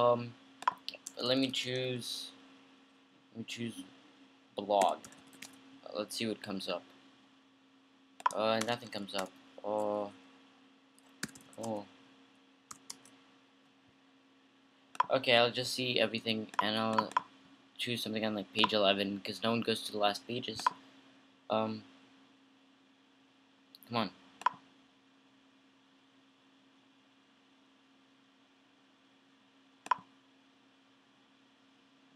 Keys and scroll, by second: 1.3-1.8 typing, 4.8-6.0 typing, 8.8 BackSpace, 8.9 BackSpace, 9.1 BackSpace, 9.4 BackSpace, 11.2-12.9 typing.